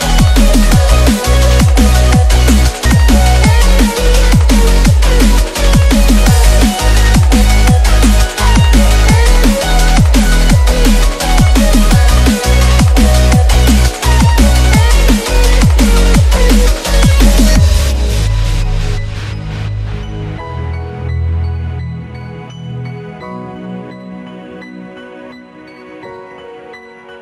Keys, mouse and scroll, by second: 0.0-3.4 typing, 5.0 shift+Return, 5.0-11.3 typing, 13.1 shift+1, 14.3-17.6 drag, 20.2 shift+click, 21.6 click, 23.5 Right.